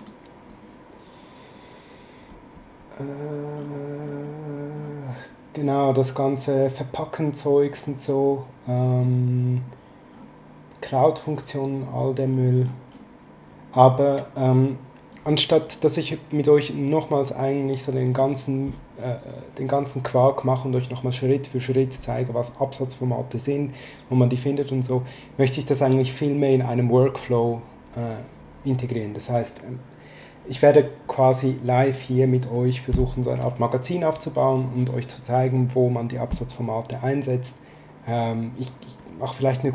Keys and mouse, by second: 0.0 click.